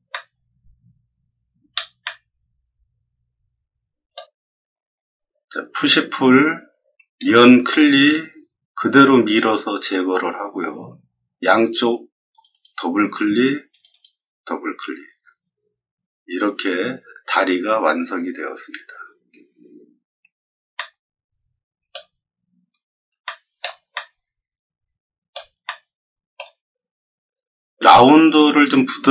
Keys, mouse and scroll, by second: 0.0-1.7 middle drag, 2.0-4.1 middle drag, 5.7 p, 7.1-9.2 drag, 12.3 click, 12.5 click, 13.7 click, 13.8 click, 20.7-21.8 middle drag, 23.2-23.5 shift+middle drag, 23.9-25.2 middle drag, 25.6-26.3 shift+middle drag, 27.1 middle click, 27.3 middle click, 27.4 middle click.